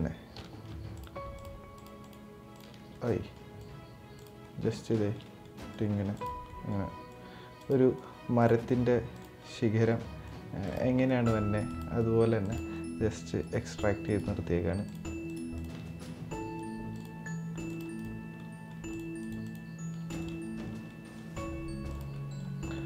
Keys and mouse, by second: 0.6 ctrl+click, 2.2 ctrl+click, 2.6 middle click, 3.3 right click, 4.1 middle click, 4.7 shift+middle click, 5.0 middle click, 5.4 right click, 6.1 middle click, 6.8 right click, 7.3 click, 7.7 right click, 8.3 right click, 9.1 click, 9.1 right click, 10.0 right click, 10.8 right click, 11.5 click, 11.7 right click, 12.4 click, 12.4 right click, 13.1 right click, 13.8 right click, 14.5 ctrl+click, 15.0 ctrl+click, 15.5 middle drag, 16.3 right click, 17.0-17.4 right drag, 17.7 right drag, 18.1 middle drag, 18.9 ctrl+click, 19.8 right click, 20.0 middle click, 20.6 middle click, 21.0-21.6 right drag, 21.8 middle click, 22.3 right click.